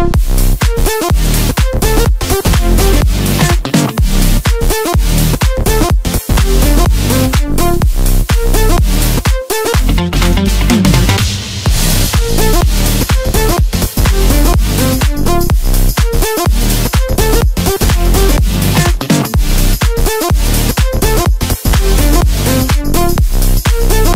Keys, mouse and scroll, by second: 0.9 click, 3.7 shift+click, 4.1 shift+click, 5.2 shift+click, 5.6 shift+click, 6.8 shift+click, 7.2 shift+click, 8.3 shift+click, 9.4-10.4 middle drag, 10.4 shift+click, 11.0-15.2 middle drag, 15.2 KP_3, 16.8-18.1 scroll up 2, 22.9-24.1 middle drag.